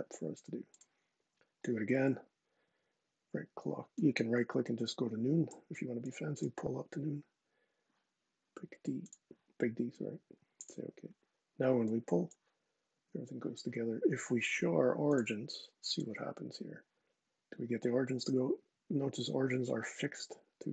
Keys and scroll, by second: 12.7 super+z.